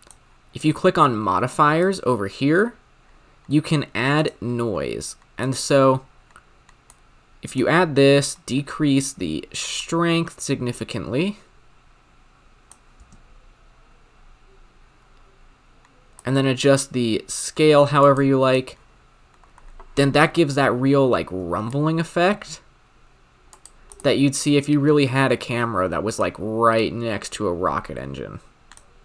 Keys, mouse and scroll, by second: 16.2-18.1 drag, 21.7-23.6 drag, 24.0-29.0 drag.